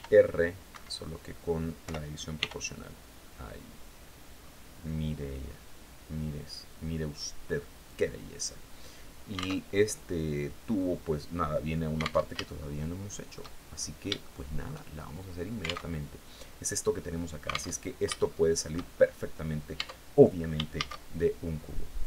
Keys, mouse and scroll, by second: 0.2 Escape, 1.3 o, 1.8 r, 3.8 scroll down 1, 4.9-7.3 scroll up 2, 7.3 click, 9.0 alt+Tab, 11.7 alt+Tab, 12.0 alt+shift+click, 13.1-13.5 shift+scroll down 2, 13.7 shift+click, 14.4 shift+scroll up 1, 15.3 alt+Tab, 17.2 alt+Tab, 17.6 shift+click, 19.2 Tab, 20.2 shift+a.